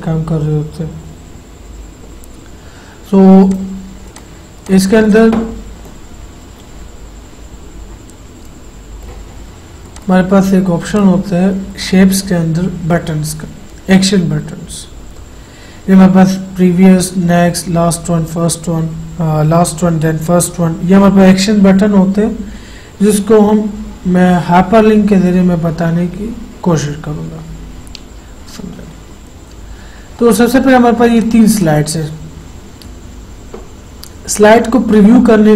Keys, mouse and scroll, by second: 5.5 right click, 5.7-10.1 right drag, 10.1 click, 12.8-14.1 scroll down 1, 31.4 click.